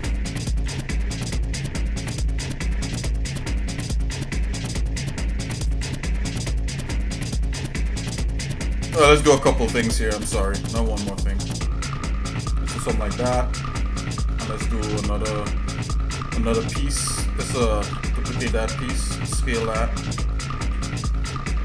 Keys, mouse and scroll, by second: 0.6 e, 6.1-7.4 shift+middle drag, 7.7 middle click, 8.3 shift+middle click, 10.3 g, 13.2 shift+middle click, 14.3 shift+middle click, 17.8 shift+d, 19.3 s.